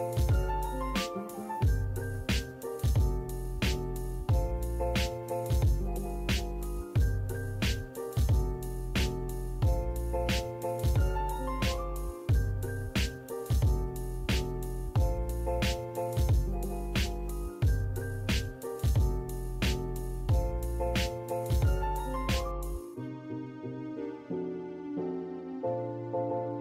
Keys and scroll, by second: 8.9 Escape, 12.1 l, 12.2 space, 14.4 Escape, 17.3 e, 17.4 space, 18.7 e, 18.7 space.